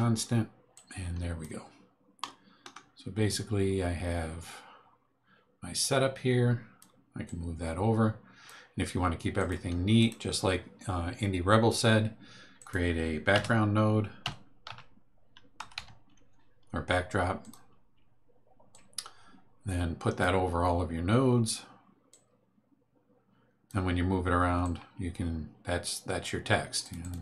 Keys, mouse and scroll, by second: 0.7 click, 2.2 click, 5.8-7.0 drag, 7.2-8.6 drag, 9.3 click, 10.0 right click, 12.6 click, 13.3 Tab, 14.2-16.2 typing, 17.4 click, 18.7-20.4 drag, 22.1-23.8 drag, 24.6-26.4 drag, 26.8 click.